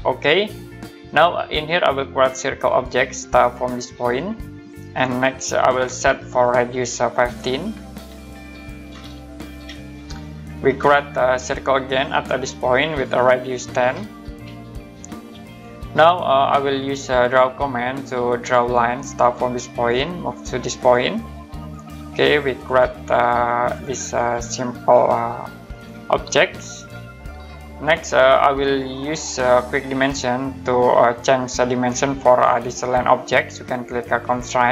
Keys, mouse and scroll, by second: 2.7 click, 4.6 click, 6.9 click, 7.2-9.5 typing, 10.8 click, 11.4 middle click, 12.8 click, 13.8-14.4 typing, 15.4 click, 16.2-17.4 scroll up 1, 17.9 click, 19.7 click, 24.5 click, 27.5 Escape, 28.0 scroll up 1, 28.5-29.3 typing, 28.6 middle click, 34.3 click.